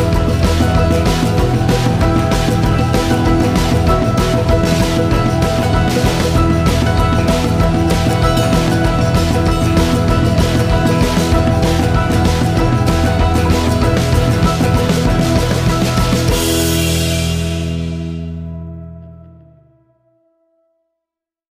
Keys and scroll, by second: 14.4 ctrl+l.